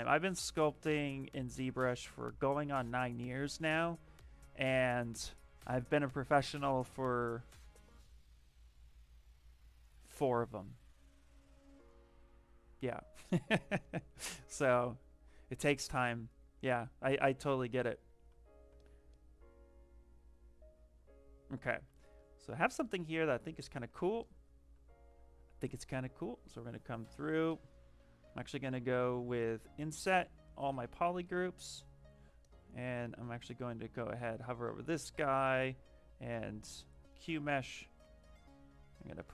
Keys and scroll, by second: 28.1 space, 33.3 space, 34.6 space.